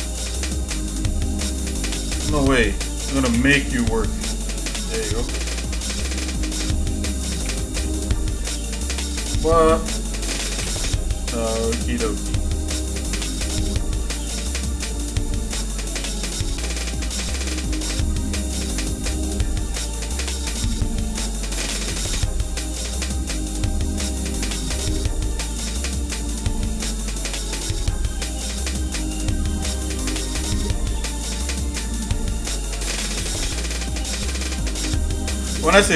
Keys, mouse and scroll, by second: 1.3 click, 2.1 shift+click, 3.3 j, 5.4 click, 6.3 shift+click, 7.4 k, 8.5-9.9 shift+middle drag, 10.6 j, 11.4 shift+middle click, 12.6 click, 13.9 middle click, 16.4 shift+middle click, 17.9 shift+middle click, 18.5-20.1 shift+middle drag, 20.5-22.6 drag, 23.1-24.6 drag, 25.7 click, 27.1 click, 28.6 click, 30.4-31.5 shift+middle drag, 33.0-34.1 drag, 35.1 click.